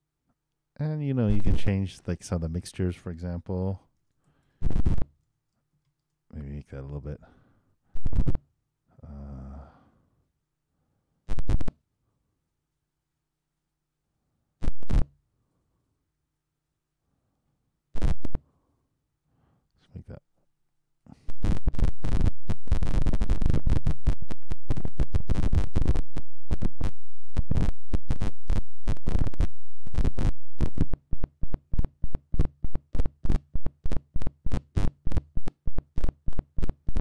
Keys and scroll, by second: 9.7 super+5, 9.9 super+Return, 21.2 super+3, 21.3 super+Return, 26.0 super+0, 30.4 super+i, 30.7 super+Return.